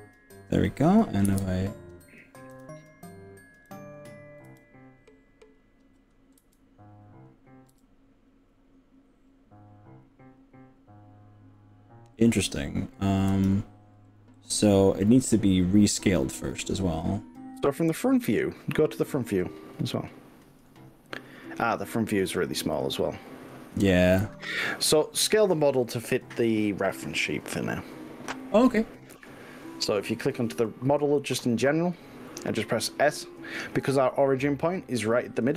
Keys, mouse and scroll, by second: 1.3 KP_1, 2.6 KP_3, 3.7 click, 4.5 g, 6.5 x, 7.9 y, 13.3 click, 14.1-14.9 scroll down 4, 15.5 scroll up 2, 16.5-17.3 scroll up 3, 17.7 middle click, 18.9-20.7 middle drag, 21.1 click, 22.5-23.1 scroll down 3, 23.3-24.5 middle drag, 28.4 middle click, 29.4 middle click, 31.3 click, 32.3-33.5 middle drag, 33.9 s.